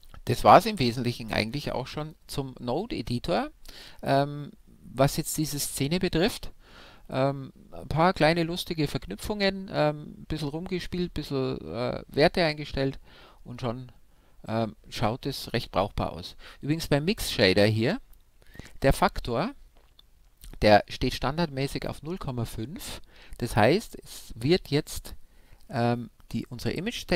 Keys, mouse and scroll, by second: 2.0-3.7 drag, 4.2-14.5 middle drag, 13.7 scroll up 1, 14.5 scroll down 1, 14.6-17.2 middle drag, 17.2-23.0 drag, 23.0-25.6 middle drag.